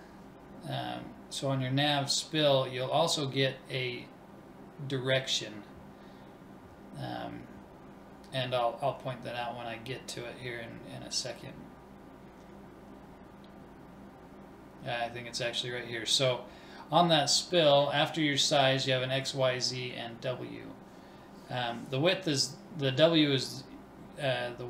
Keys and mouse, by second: 21.7 middle click, 22.4 click, 23.1 ctrl+s, 23.5 click.